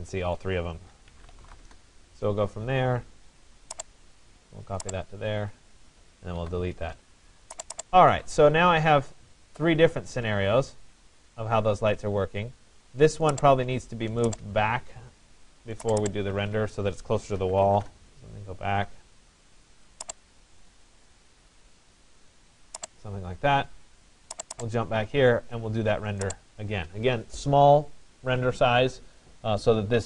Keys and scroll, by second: 1.3 Return, 5.5 Escape, 6.4 Delete, 17.5 Return.